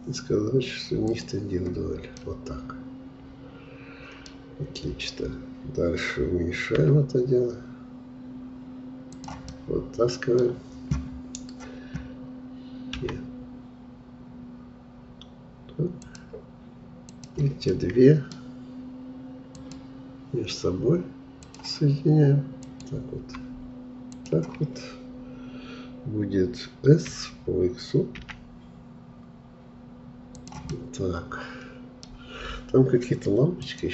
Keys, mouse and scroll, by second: 1.1-2.2 drag, 2.2-5.2 middle drag, 6.8 s, 9.5-12.6 middle drag, 13.0 e, 17.1 click, 17.8-19.6 middle drag, 19.6-27.1 drag, 27.1 s, 30.7-33.9 middle drag.